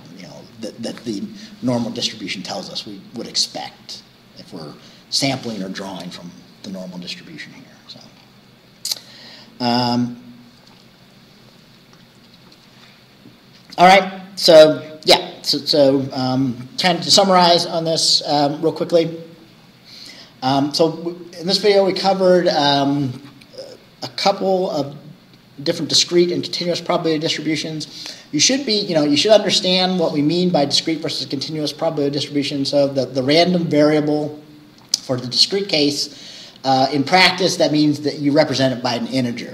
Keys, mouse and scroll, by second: 8.2-8.5 scroll down 2, 9.3-9.7 scroll down 2, 13.9 middle click, 15.9 click.